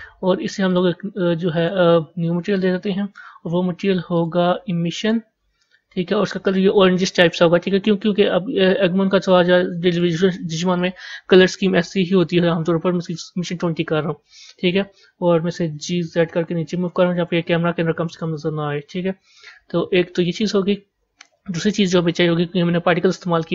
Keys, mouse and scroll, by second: 1.5-6.4 drag, 10.6-13.8 drag, 15.6 g, 18.1 KP_0.